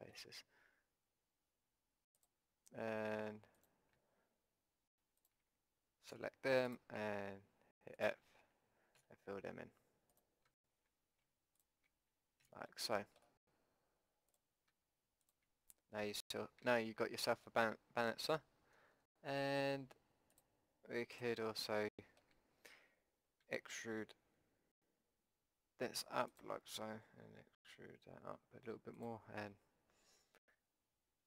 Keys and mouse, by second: 6.1 f, 9.0 f, 10.0 middle click, 12.5 f, 12.7 click, 14.3-17.2 drag, 16.3 f, 17.2-19.5 middle drag, 19.5-23.2 drag, 23.2 middle click, 23.4 e, 26.7 e, 30.2 s.